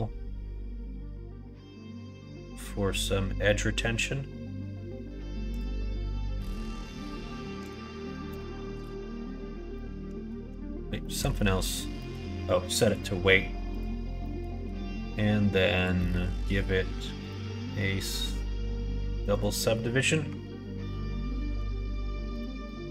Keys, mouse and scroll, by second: 6.4-9.2 drag, 9.6 middle click, 10.4 Tab, 10.9 middle click, 11.4 middle click, 11.9 shift+middle click, 12.8 click, 14.1 middle click, 14.4 Tab, 15.7-17.2 drag, 19.3 click, 19.6 middle click, 20.2 Tab, 21.4 /, 22.2 click, 22.6 middle click.